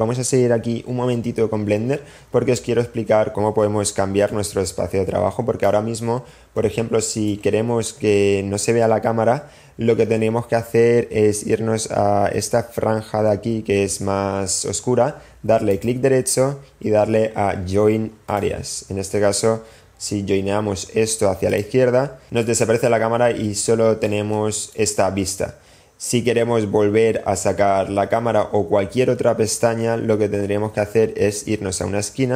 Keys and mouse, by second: 6.7-8.0 drag, 8.8-9.6 middle drag, 15.9-22.1 drag, 23.4-25.1 middle drag.